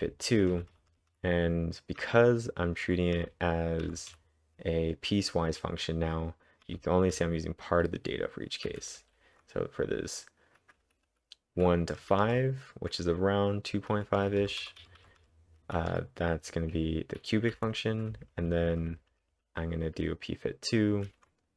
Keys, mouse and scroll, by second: 0.3-1.1 typing, 2.9-4.4 typing, 7.2 typing, 10.6-12.5 typing, 14.6-15.9 typing, 19.1-19.8 typing.